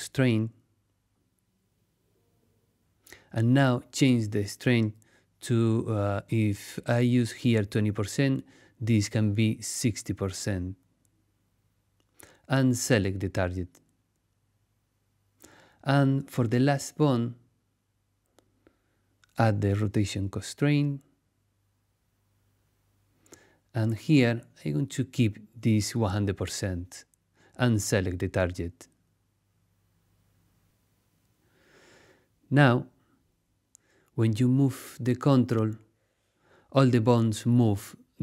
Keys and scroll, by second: 10.1-11.1 typing, 11.3 Return.